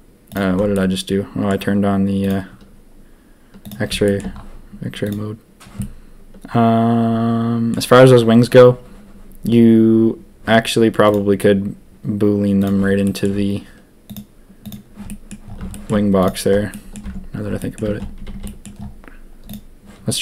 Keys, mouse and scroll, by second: 0.7 middle click, 2.2 click, 3.6 click, 4.0 shift+middle drag, 5.0 click, 5.7-7.7 middle drag, 11.0 click, 14.1 click, 14.6 click, 15.0 middle drag, 15.7 shift+drag, 16.7 drag, 17.0 Tab, 17.5 click, 17.8 Tab, 18.1 a, 18.3 a, 18.4 middle drag, 19.4 click.